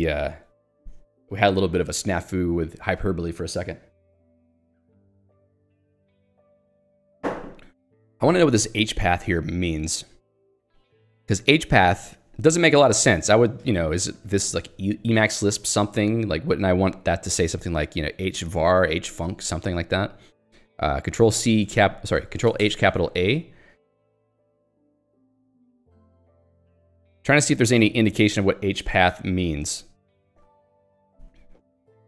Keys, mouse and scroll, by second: 3.9 k, 6.8 j, 7.7 l, 8.5 j, 8.9 l, 17.6 h, 22.1 ctrl+g, 22.9 ctrl+a, 26.0 click, 26.6 j.